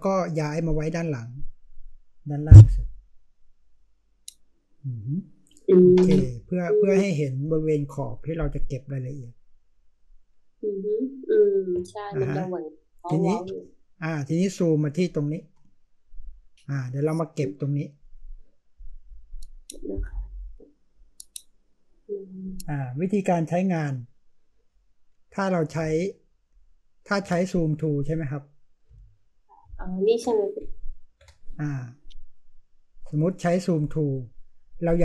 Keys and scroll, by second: 12.2 space, 25.8 ctrl+space, 26.3 ctrl+space, 27.6-28.9 ctrl+space, 28.9-29.6 space.